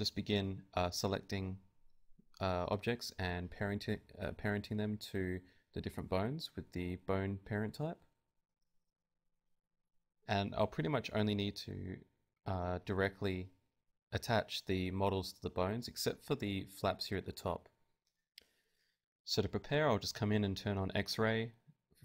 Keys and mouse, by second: 1.2 ctrl+Tab, 2.2 ctrl+p, 3.9 ctrl+Tab, 4.2-6.6 drag, 4.4 ctrl+Tab, 4.7 r, 5.4 r, 6.6 right click, 8.2 ctrl+p, 8.6 ctrl+Tab, 9.4 ctrl+Tab, 9.9 r, 10.3 z, 10.6 r, 11.9 ,, 12.2 r, 14.2 r, 15.3 r, 15.4 g, 16.8 middle click, 17.2 z, 17.7 z, 18.7-21.7 drag.